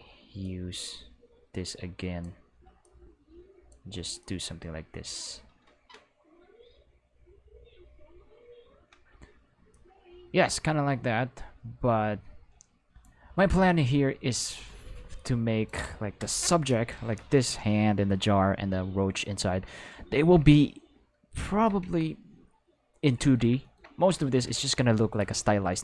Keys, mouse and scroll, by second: 0.4-2.1 drag, 2.7 click, 4.1-5.2 drag, 9.6-12.9 drag, 15.1 click, 16.1 Return, 20.1 shift+middle click, 24.1 shift+middle click, 24.9 ctrl+middle click.